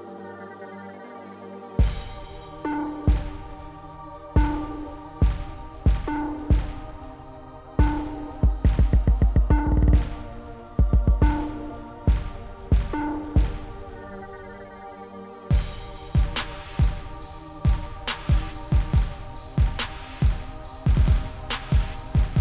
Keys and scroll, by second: 15.6 BackSpace, 15.9 1, 17.9 0.